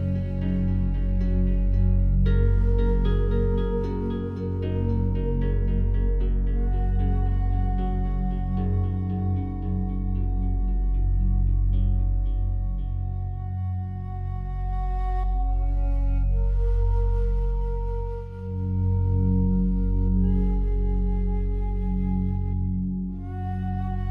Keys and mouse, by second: 1.0 click, 1.4 click, 2.1-2.6 typing, 3.8 click, 4.6 click, 5.4-6.2 alt+shift+drag, 7.0-7.4 drag, 7.9-8.6 drag, 8.9 click, 9.6 typing, 10.1 click, 11.0 click, 12.0 click, 13.2 click, 14.0-14.4 drag, 14.7-16.0 drag, 18.4-24.1 drag.